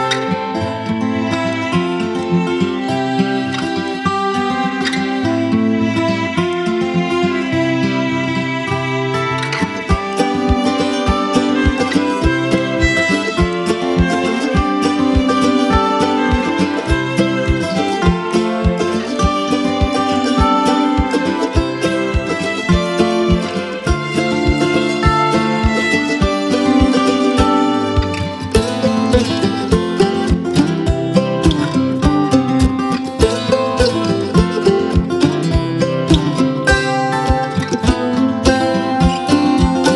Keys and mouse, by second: 1.2-4.5 drag, 6.0 space, 6.2 click, 6.5-6.8 space, 8.7 alt+BackSpace, 9.6 space, 9.8 click, 10.1 space, 10.3 click, 10.4 space, 12.2 click, 12.8-13.5 space, 13.9 [, 16.6 click, 18.2-18.6 drag, 20.9 alt+BackSpace, 22.2-24.9 typing, 22.5 click, 23.2 click, 24.0 click, 26.4-27.9 drag, 30.2-31.8 drag, 37.6-39.4 drag.